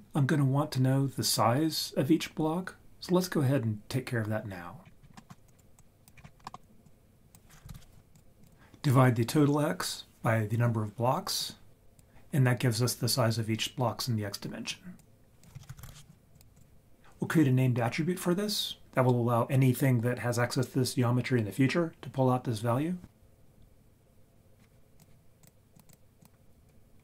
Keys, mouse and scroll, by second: 4.8-5.2 scroll down 5, 5.1 scroll up 1, 5.2 middle click, 5.8 click, 6.2 scroll up 4, 6.3 scroll down 1, 6.4 scroll up 1, 6.5 middle click, 6.5 scroll down 1, 6.8-8.2 drag, 8.4 click, 11.4 click, 14.7 click, 15.4 click, 15.6 shift+a, 15.7 s, 25.4-25.8 drag, 25.9-26.2 drag.